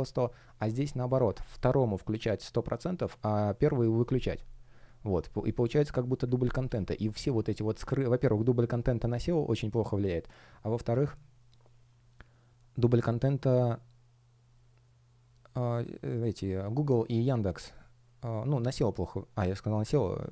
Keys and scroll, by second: 0.6 super+я, 6.3 super+я, 7.5 shift+super+я.